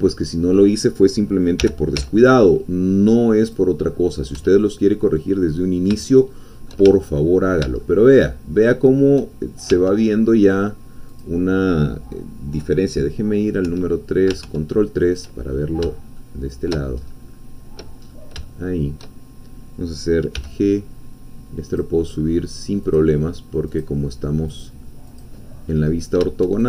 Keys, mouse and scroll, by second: 1.6 g, 2.0 z, 3.4 click, 3.8-4.3 scroll down 1, 4.4 Tab, 4.6-6.0 drag, 6.2 shift+middle click, 6.9 ctrl+shift+click, 7.0 ctrl+shift+middle click, 7.2-8.2 ctrl+drag, 8.2-9.3 shift+middle drag, 9.8 Tab, 11.1 click, 13.6 3, 14.4 ctrl+3, 16.2 shift+click, 17.0-18.0 shift+scroll up 3, 18.0 scroll up 1, 18.5-19.5 shift+drag, 20.3 g, 21.7 click, 22.9-24.0 drag, 24.6 click, 25.7-26.2 scroll up 1.